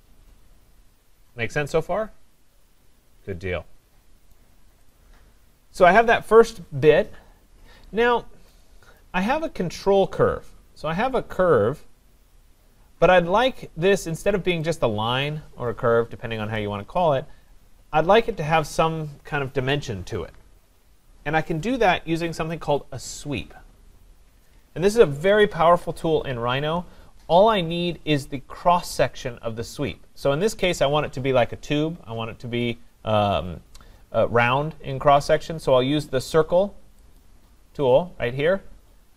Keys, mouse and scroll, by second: 4.3 right click, 5.0 click, 7.9-8.5 scroll, 9.0 right click, 9.3 scroll, 14.7 click, 15.4 click, 17.3-19.8 drag, 25.4-30.6 drag, 37.2 click.